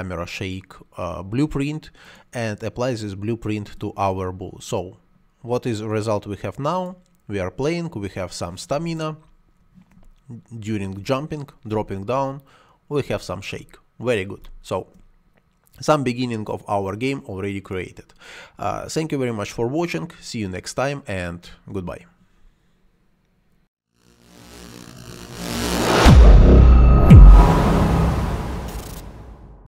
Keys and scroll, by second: 9.5 space.